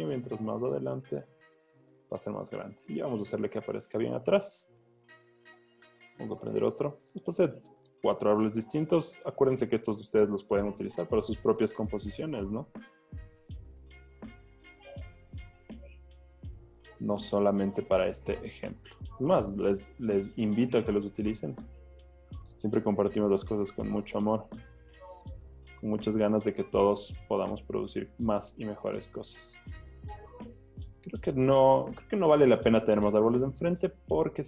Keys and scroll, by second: 2.3 Return, 7.3 b, 8.3 v, 15.3 super+t, 21.9 Return, 31.7 super+t.